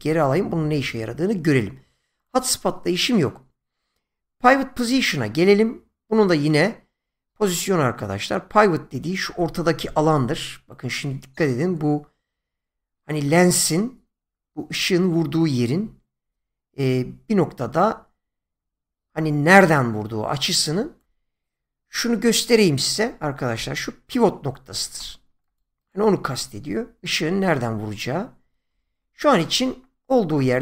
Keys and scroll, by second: 23.0 <, 28.7 ctrl+z.